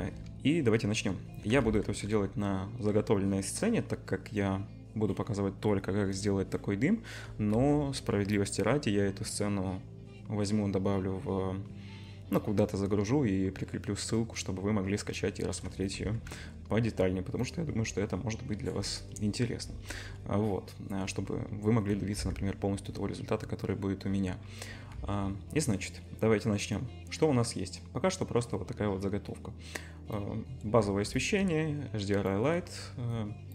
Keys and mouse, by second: 0.4 middle click, 1.6 z, 2.1-3.3 middle drag, 7.5-9.0 middle drag, 7.5 z, 10.2-11.9 middle drag, 12.0-17.9 middle drag, 15.9 z, 18.0 middle click, 19.6 KP_0, 22.1 z, 24.9 z, 30.1-32.7 middle drag, 32.8 middle click.